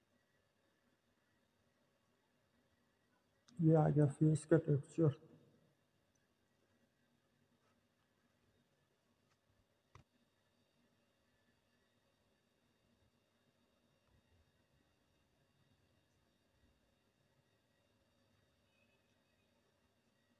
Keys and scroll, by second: 7.6-8.9 typing, 18.9-20.3 typing.